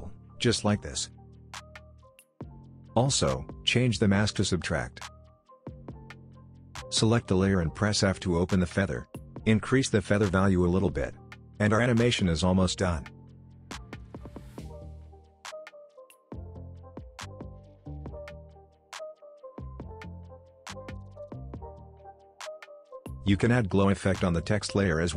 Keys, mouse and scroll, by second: 8.1 f, 9.2-11.1 drag, 12.9-14.8 drag, 15.2 v, 15.3 click, 15.8 alt+scroll down 1, 16.4-16.9 click, 16.7 space, 18.6-20.2 drag, 19.5-20.2 drag.